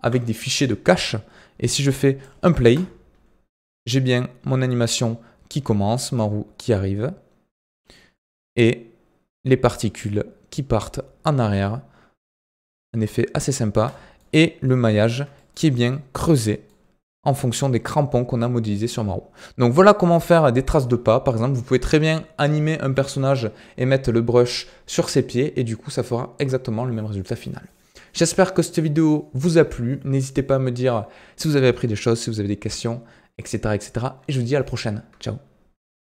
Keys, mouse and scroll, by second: 1.7-2.4 drag, 2.4 scroll down 3, 2.5 space, 5.6 scroll up 1, 11.3 scroll up 3, 11.6-13.8 middle drag, 13.8 space, 13.8 middle drag, 14.1-15.8 scroll up 11, 14.6-14.9 middle drag, 15.3 shift+middle drag, 15.8-17.3 middle drag, 17.3-18.1 scroll down 12, 18.3-19.7 middle drag, 19.7-20.2 scroll up 7, 20.2-21.4 shift+middle drag, 21.4-21.9 scroll down 8, 21.9-24.9 middle drag.